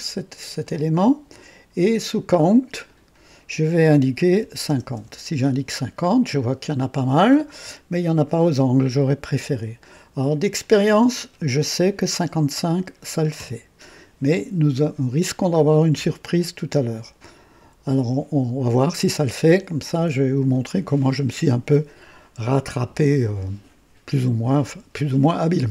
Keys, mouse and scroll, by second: 0.6-1.5 drag, 2.8 click, 4.3 KP_5, 4.6 KP_0, 4.9 Return, 6.2 scroll up 1, 6.9 right click, 10.5 click, 12.3 KP_5, 12.5 KP_5, 13.3 KP_Enter.